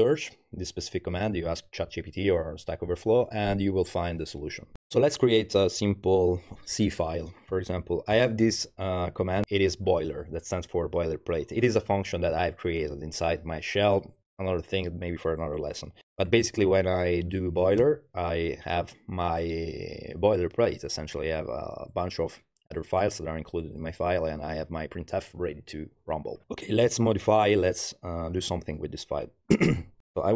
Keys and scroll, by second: 4.8 ctrl+l, 7.3-8.6 typing, 9.4 Tab, 17.8 Return, 30.0 i, 30.1 Home.